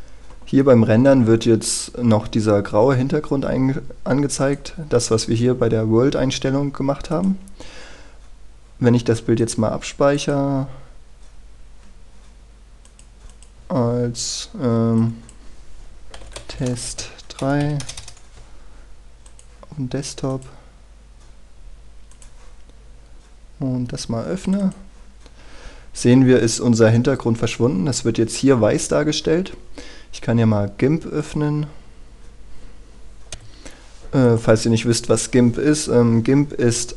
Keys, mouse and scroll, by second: 16.7-18.1 typing, 19.9-25.3 drag, 28.7-30.0 scroll up 1, 30.0-31.9 scroll down 1, 31.9 click, 34.0 F9, 34.5-36.9 drag.